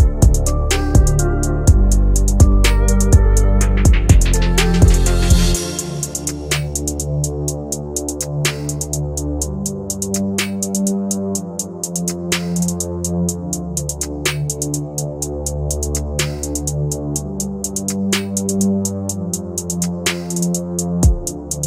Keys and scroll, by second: 6.7 F3, 7.0 Escape, 14.2 shift+F2, 14.5 Escape, 17.2 F4, 17.9 F3.